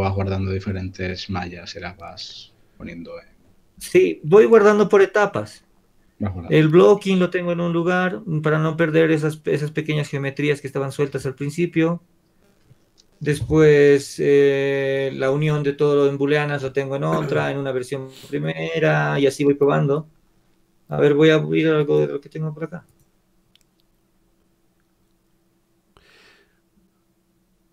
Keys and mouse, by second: 14.7-17.1 middle drag, 21.9-27.7 drag.